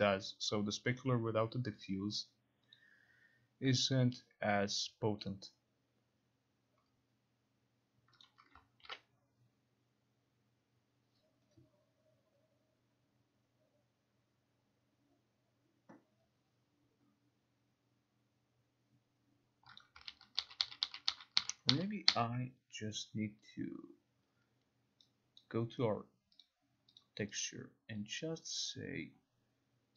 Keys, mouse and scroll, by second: 0.4-1.9 drag, 1.9 click, 2.9 click, 4.0 click, 5.4 click, 8.3 click, 8.9 ctrl+r, 19.9 click, 20.2 ctrl+z, 20.5 ctrl+z, 20.7 ctrl+z, 20.9 ctrl+z, 21.2 ctrl+z, 21.5 ctrl+z, 21.8 ctrl+z, 22.2 ctrl+z, 25.5 click, 26.5 click, 27.1 click, 27.5 click, 28.8 click.